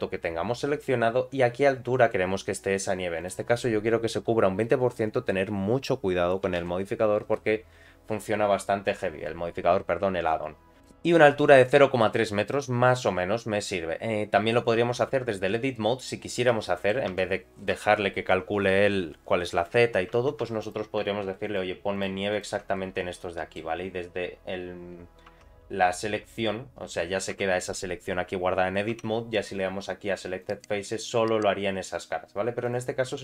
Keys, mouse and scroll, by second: 3.2-13.8 drag, 15.7 middle click, 16.5 Tab, 16.6 middle click, 17.1 3, 17.7 Tab, 20.1 Tab, 20.4 3, 20.6 click, 21.4 shift+click, 21.9 shift+click, 22.3 shift+click, 22.7 middle click, 25.3 Tab, 27.3 Tab, 28.9 Tab, 30.4 click, 32.6 click.